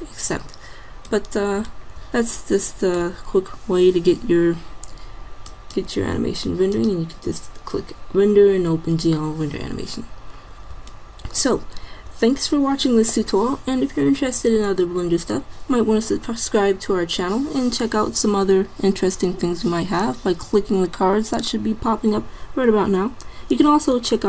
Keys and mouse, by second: 4.7 middle click, 8.6 middle click.